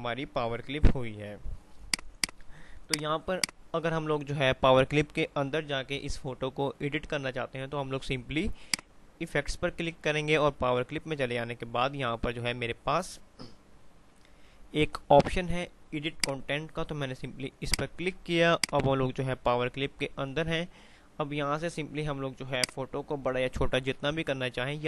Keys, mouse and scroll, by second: 2.0 click, 8.9 click, 16.3-22.8 drag, 22.8-24.8 drag.